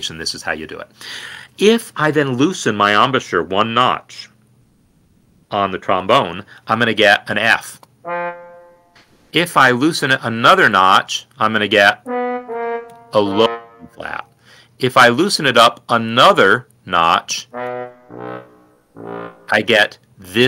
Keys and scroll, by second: 1.0 b, 1.4 Down, 2.1 ctrl+Down, 4.7 Right, 6.8 b, 7.2 ctrl+Down, 7.9 Down, 8.5 Escape.